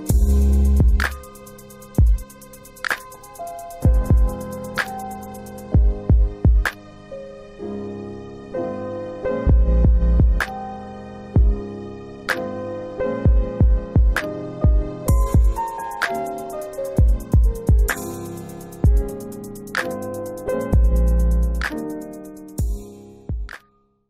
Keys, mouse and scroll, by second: 0.0 middle click, 0.8 click, 1.5 scroll down 2, 2.2 middle click.